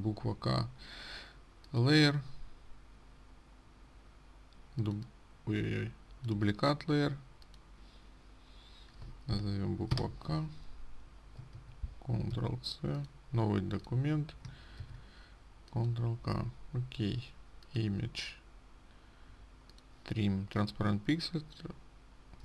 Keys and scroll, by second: 12.1 ctrl+a, 12.8 ctrl+c, 15.2 ctrl+v.